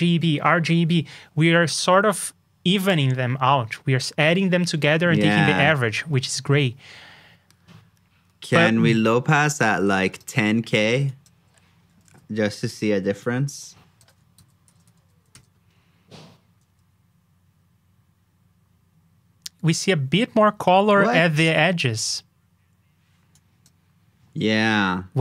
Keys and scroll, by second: 14.3 super+c, 14.6 super+j.